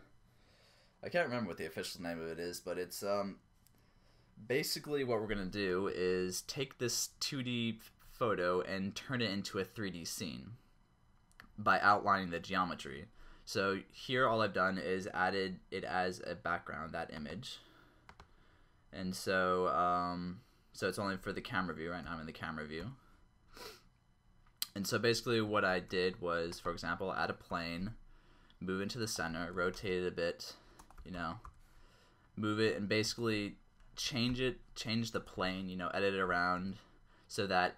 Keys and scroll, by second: 22.2 0, 22.8 0, 25.7 a, 27.7 g, 29.1 Return, 29.6 r, 29.8 x, 30.9 Return, 31.0 s, 31.2 y, 31.5 y, 33.1 Return, 34.0 r, 34.3 x, 35.2 Return, 35.4 Tab, 36.3 s, 36.6 x.